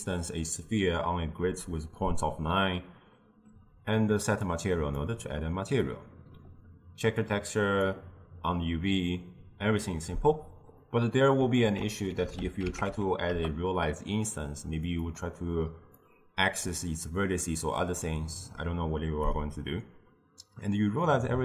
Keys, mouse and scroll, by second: 4.5 click, 5.9-7.3 middle drag, 7.3 click, 10.9 middle click, 11.7 ctrl+a, 15.3 middle click, 16.1-19.1 drag.